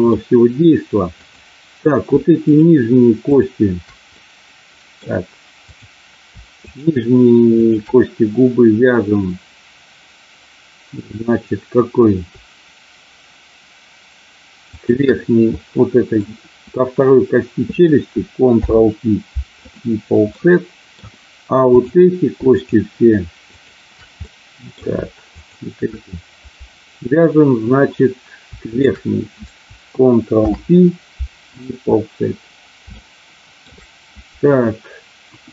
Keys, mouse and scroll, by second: 1.2 click, 2.3 shift+click, 4.2 middle click, 5.6 click, 7.6 shift+click, 14.7 shift+click, 15.6 middle click, 18.6 ctrl+p, 20.4 middle click, 21.6 click, 22.6 shift+click, 23.5 shift+click, 24.1 middle click, 25.5 shift+click, 28.7 shift+click, 30.4 ctrl+p, 32.9 shift+middle click, 35.2 KP_1.